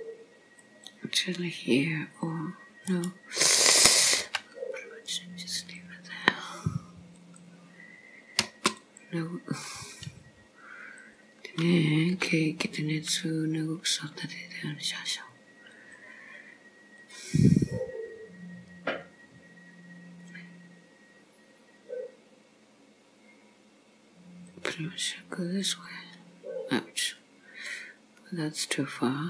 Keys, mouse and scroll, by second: 4.2 k, 8.8 click, 9.9 click, 11.0 click, 12.2 k.